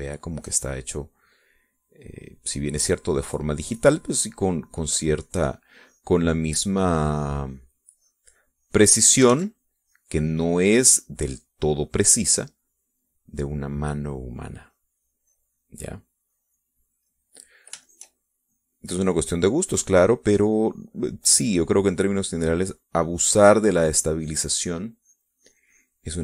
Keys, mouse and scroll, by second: 0.3-1.8 middle drag, 2.4-8.7 drag, 8.7-10.6 middle drag, 10.2 ctrl+z, 10.6-11.9 ctrl+drag, 12.0 click, 13.3-17.9 drag, 18.0 middle click, 18.7 shift+click, 19.3-24.4 shift+drag, 24.9 click.